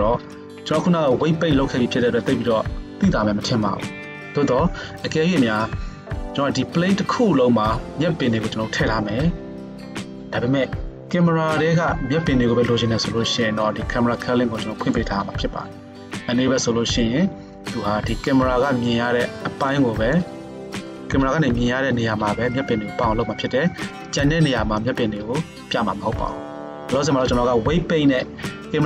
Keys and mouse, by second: 15.0-18.4 middle drag, 18.4 click, 18.6-28.8 middle drag.